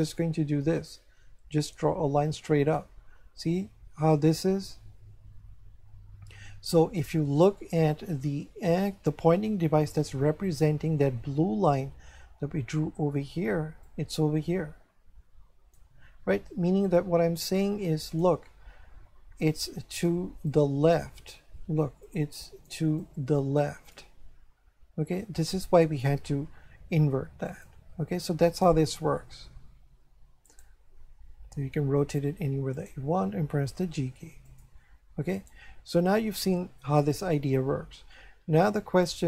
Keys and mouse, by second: 13.9 click, 17.1 Escape, 18.1 click, 19.6 click, 22.0 click, 25.1 Escape, 27.5 click, 30.5 right click, 31.3 r, 32.7 right click, 33.5 g, 34.5 click, 35.4 right click.